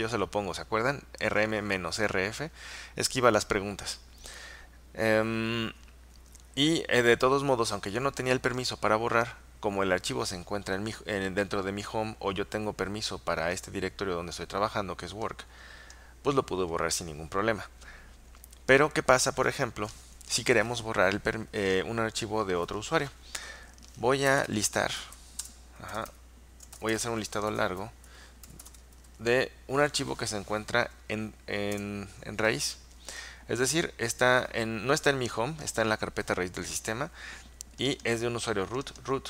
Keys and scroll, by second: 24.3-29.2 typing, 31.8 Return.